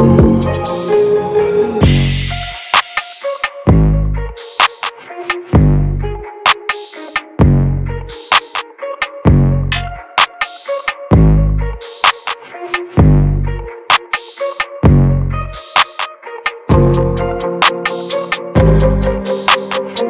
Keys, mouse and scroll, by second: 1.5-5.9 middle drag, 5.9 ctrl+z, 9.3-11.1 drag, 11.1 ctrl+z, 13.1-14.7 drag, 14.7-16.2 middle drag, 16.2 ctrl+z, 16.7-17.8 drag, 17.8-20.0 middle drag.